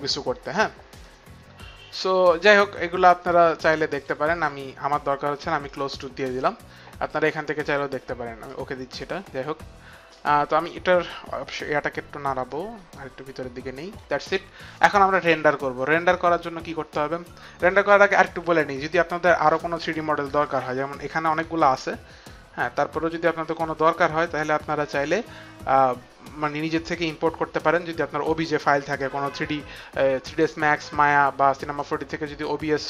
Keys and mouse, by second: 4.0 click, 5.7 click, 8.5 click, 10.1 click, 12.5 click, 21.3 click, 21.7 click.